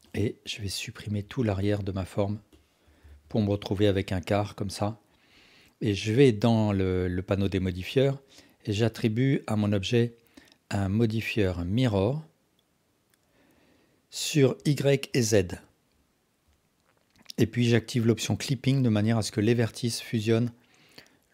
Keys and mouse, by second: 0.1-0.8 drag, 1.2 x, 2.5-2.9 alt+drag, 3.1 alt+z, 3.5-5.2 alt+drag, 7.9-13.1 drag, 19.2 alt+drag.